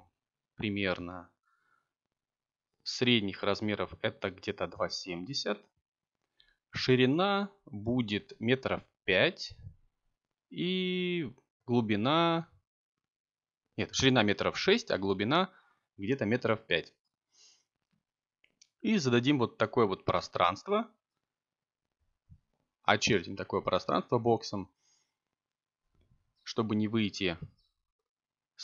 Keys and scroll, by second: 11.3 6, 12.6 Return, 14.8 5, 16.4 Tab, 19.0 0, 20.3 ..